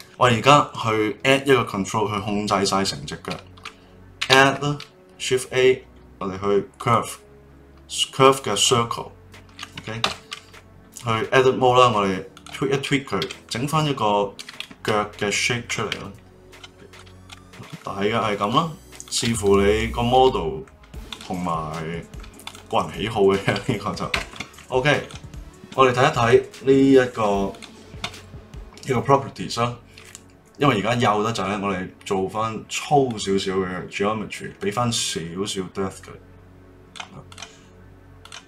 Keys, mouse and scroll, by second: 0.0 click, 4.2 shift+a, 10.0 Tab, 10.5-12.3 middle drag, 12.3 click, 13.2 g, 15.2 middle click, 15.9 ., 16.3 g, 16.5 middle click, 16.9 click, 16.9 g, 17.2 middle click, 17.6 click, 17.7 g, 19.0 click, 19.2 g, 19.3 middle click, 20.1 g, 21.4-22.4 middle drag, 22.4 click, 24.1 Tab, 25.0 click, 26.2 click, 27.5 click, 33.1-37.3 drag, 38.2 click.